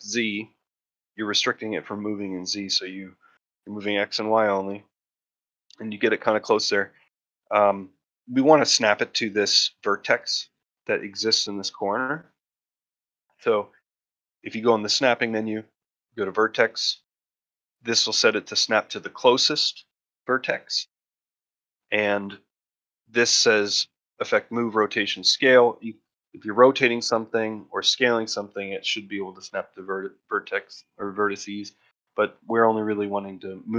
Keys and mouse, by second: 6.2-6.5 ctrl+middle drag, 6.6-7.1 shift+middle drag, 7.3 ctrl+middle drag, 7.7 shift+middle drag, 8.1 ctrl+middle drag, 11.7 shift+middle drag, 14.7-33.7 drag.